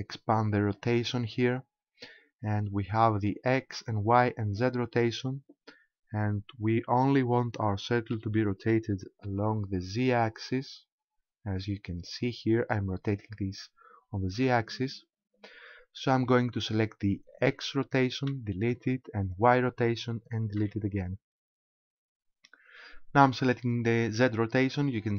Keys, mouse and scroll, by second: 0.8 click, 4.9-6.5 scroll down 1, 6.5 scroll down 1, 8.2 r, 14.4 right click, 17.4 click, 18.3 Delete, 19.3 click, 20.6 Delete, 24.2 click.